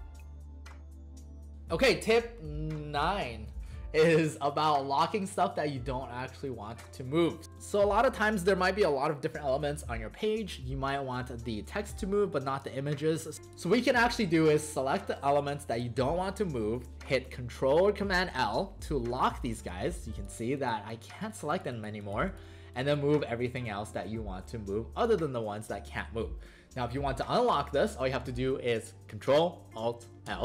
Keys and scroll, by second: 7.4 alt+space, 12.3 space, 18.2 ctrl+l, 24.0 ctrl+z, 30.3 ctrl+alt+i.